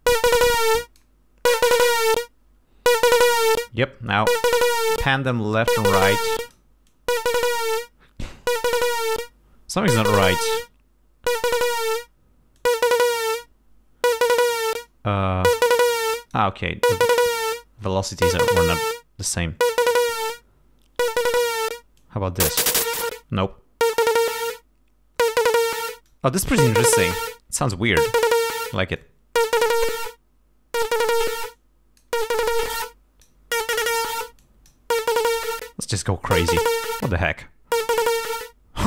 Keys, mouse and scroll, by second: 0.8 click, 1.7-2.2 scroll down 4, 4.2 click, 5.4 click, 6.2 click, 7.0-8.0 drag, 11.8 click, 12.7 click, 14.9-16.6 drag, 17.2 click, 20.1-21.8 drag, 22.1-26.4 drag, 29.1-31.3 drag, 31.6 click, 32.7 click, 34.5 click, 35.2-36.6 drag.